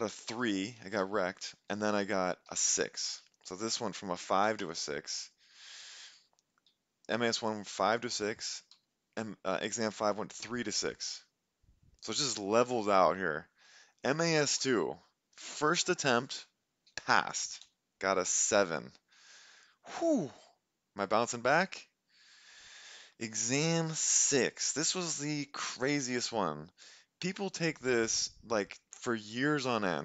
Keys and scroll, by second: 0.1 3, 0.3 Return, 0.8 Up, 1.0 Left, 2.5 6, 3.0 Up, 3.3 Up, 4.5 6, 4.7 Return, 6.2 Up, 6.4 Right, 7.9 Left, 8.5 Right, 8.8 Down, 8.8 Left, 10.0 Right, 10.6 Left, 17.6 7, 18.3 Return.